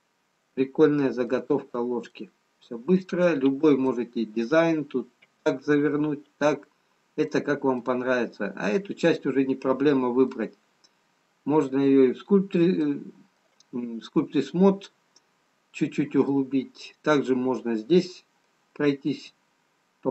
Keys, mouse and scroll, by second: 1.1 middle click, 2.0 Tab, 5.4 middle click, 7.1-7.5 scroll down 1, 8.1 middle click, 8.1 scroll down 1, 13.8 middle click, 16.8 middle click.